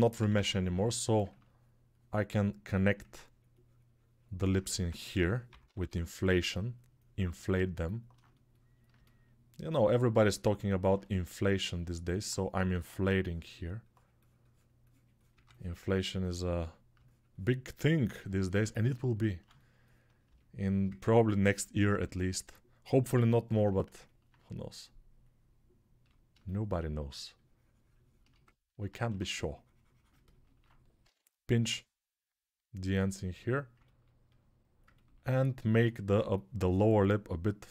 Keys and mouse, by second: 0.1 [, 0.2 [, 0.4 [, 0.5 [, 4.9-5.7 typing, 5.5-21.4 drag, 12.3 3, 15.1 2, 21.4 alt+shift+right click, 21.8-28.6 alt+drag, 22.8 1, 28.8 1, 29.1 ctrl+click, 30.0-33.6 ctrl+alt+right drag, 30.8 p, 33.6-37.7 ctrl+alt+drag, 35.8 6.